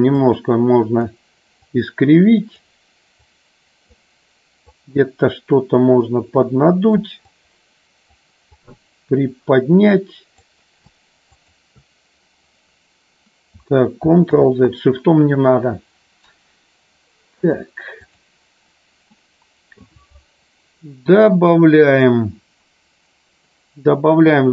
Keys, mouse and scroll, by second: 0.2 click, 1.8 click, 3.3 click, 4.7-5.8 drag, 6.4 click, 7.4 click, 8.7-10.4 drag, 14.4 ctrl+z, 17.3 click, 19.1 middle click.